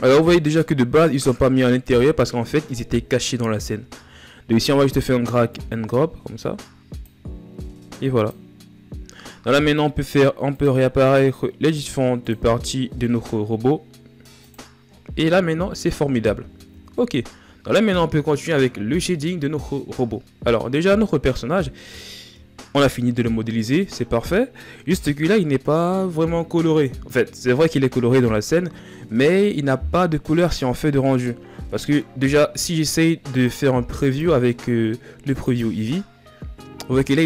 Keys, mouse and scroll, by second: 5.2-15.1 drag, 15.1-15.6 shift+scroll down 4, 15.8-16.6 scroll down 4, 16.6-19.7 scroll up 2, 21.7-24.9 shift+scroll up 4, 33.2-36.3 drag, 36.3-36.7 scroll down 1, 36.7-37.2 middle drag.